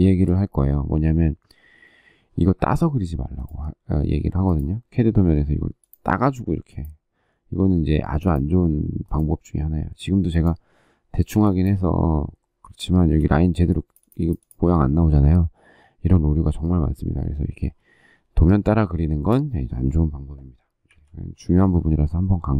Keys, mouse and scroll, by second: 12.7 space, 20.7 Delete.